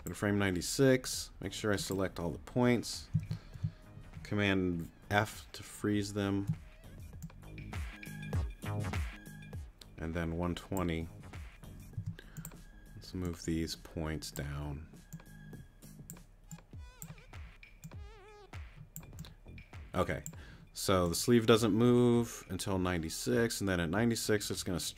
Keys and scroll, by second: 5.1 super+f, 11.9 t.